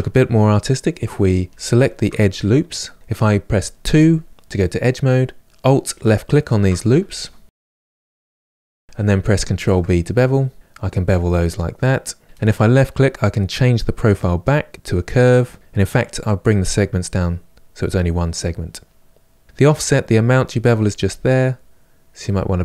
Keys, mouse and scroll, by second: 1.2 ctrl+z, 2.2 2, 5.6 alt+click, 7.1 alt+shift+click, 7.6-8.1 middle drag, 8.1 alt+shift+click, 8.4-9.2 middle drag, 9.3 ctrl+b, 13.9-15.5 drag, 16.8 click, 19.5-22.5 drag.